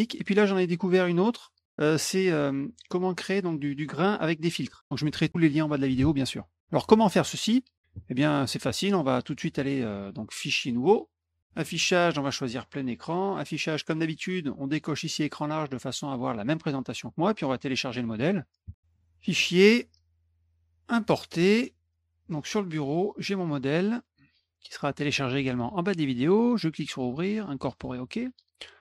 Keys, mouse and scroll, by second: 1.0 click, 3.0 click, 6.0 alt+Tab, 10.6 click, 11.5 click, 12.5 click, 13.4 click, 15.1 click, 18.6 alt+Tab, 18.9 click, 20.9 click, 22.2 click, 23.9 click, 26.4 click, 27.7 click.